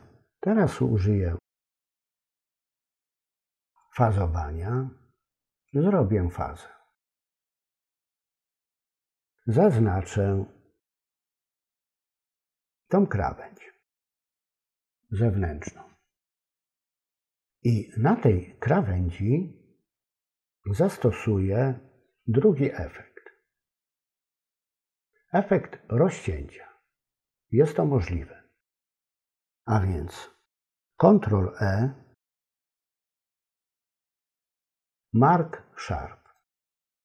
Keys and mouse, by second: 1.2 ctrl+b, 8.9 click, 32.2 ctrl+l.